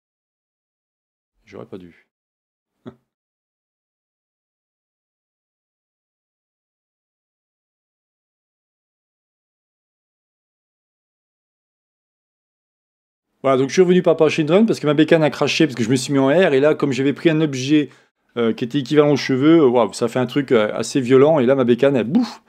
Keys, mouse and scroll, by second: 7.3-8.0 scroll down 1, 13.0 click.